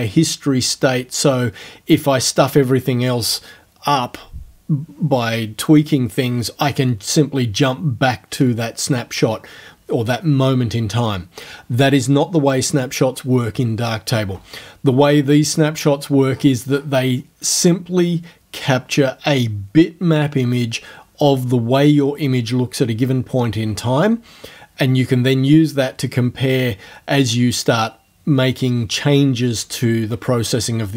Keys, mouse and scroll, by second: 16.6-30.9 scroll down 1.